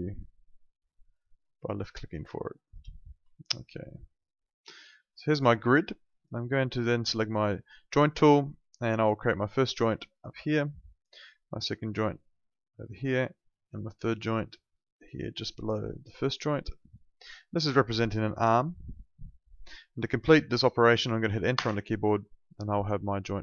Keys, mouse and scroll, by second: 2.7 space, 3.3 alt+middle click, 3.6 alt+right click, 4.7 alt+middle click, 7.9 click, 21.5 Return.